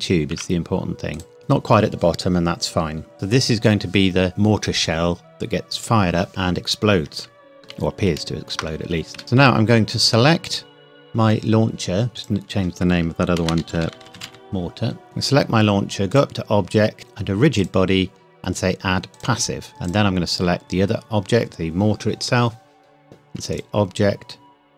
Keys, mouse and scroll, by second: 0.3 z, 1.2 click, 1.4-2.2 scroll down 1, 8.0 ctrl+s, 9.6 shift+middle click, 10.0 click, 13.4-14.2 typing, 15.0 click, 23.5 click.